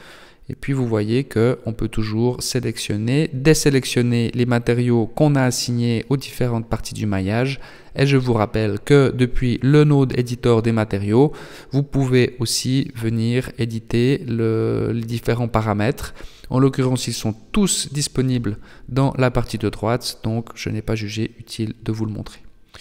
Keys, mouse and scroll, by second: 0.3 click, 1.1 click, 1.6 click, 3.9 click, 5.4 click, 7.2-8.6 scroll up 12, 8.7 middle click, 9.8 click, 10.8-11.2 scroll down 1, 11.3 middle click, 13.8 click, 15.4 click, 17.3 click, 18.8-19.8 scroll down 1, 19.8 scroll down 3, 20.2 middle click, 22.5 middle click.